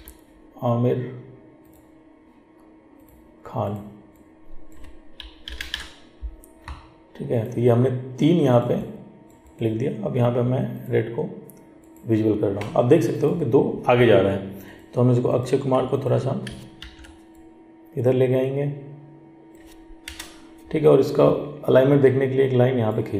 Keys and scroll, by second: 16.9 ctrl+t.